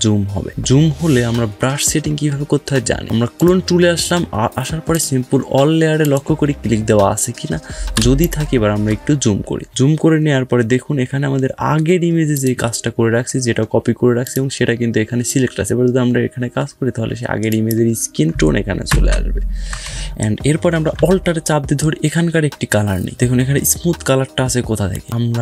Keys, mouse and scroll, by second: 0.4 ctrl+space, 0.6 scroll down 1, 3.0 right click, 3.2 click, 3.6 typing.